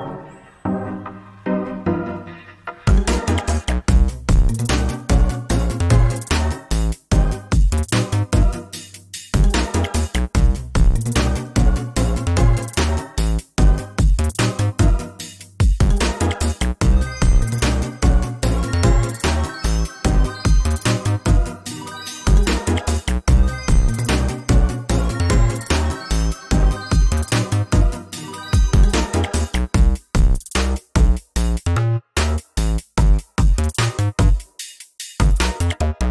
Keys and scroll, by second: 4.7 ctrl+z, 8.9 ctrl+space, 13.4 ctrl+a, 16.2 ctrl+v, 17.4 ctrl+c, 20.3 ctrl+z, 27.0 ctrl+z, 30.2 ctrl+a, 35.4 ctrl+space.